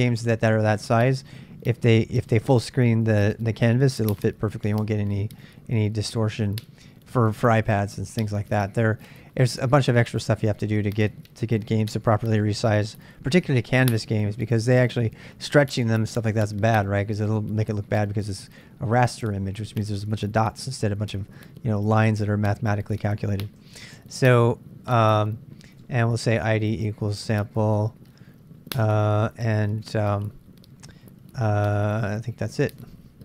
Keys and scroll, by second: 8.4 ctrl+[, 8.5 h, 10.5 shift+a, 25.7-27.8 typing, 29.3 typing, 32.3 ctrl+[, 32.4-33.1 typing.